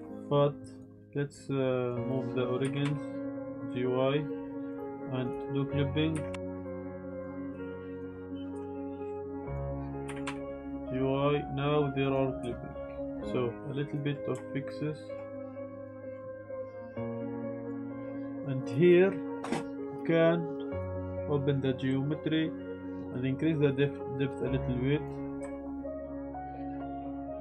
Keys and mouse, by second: 0.8-2.1 drag, 2.6 g, 2.8 y, 4.6 click, 5.2 click, 6.1 g, 6.3 y, 6.5 click, 7.2-8.2 drag, 8.5 Tab, 9.4 click, 10.0 g, 10.2 y, 12.0 click, 12.4 Tab, 13.1 Tab, 13.9 click, 14.5 shift+click, 15.4 g, 15.4 y, 15.7 click, 15.8 Tab, 16.5 shift+click, 16.8 s, 16.9 x, 18.2 Tab, 18.6 click, 18.8 click, 20.7 click, 22.8 ctrl+z, 22.8-25.0 drag, 25.4 Tab, 25.9 Tab, 25.9-27.4 typing, 26.1 shift+click, 26.4 shift+click, 26.9 click, 27.1 click, 27.3 click.